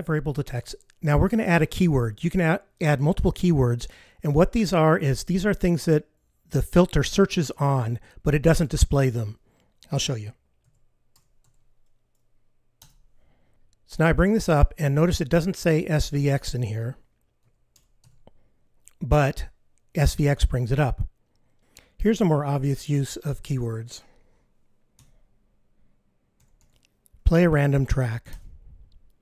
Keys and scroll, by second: 13.4 F15, 22.0 F15, 24.7 F15, 28.9 super+F15.